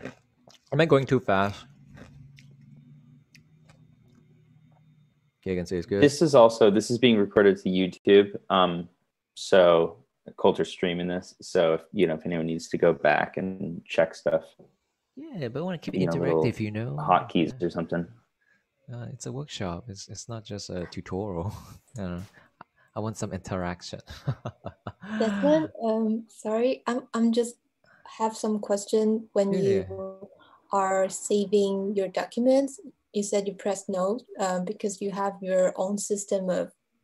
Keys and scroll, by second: 33.7 super+s.